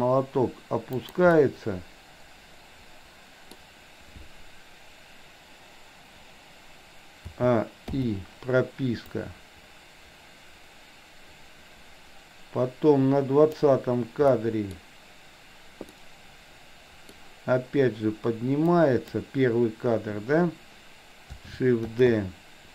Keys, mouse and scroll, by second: 1.4-3.6 middle drag, 7.4 a, 8.0 i, 9.2-13.6 drag, 14.4-14.7 middle drag, 15.9-17.2 middle drag, 18.7 click, 22.0 shift+d.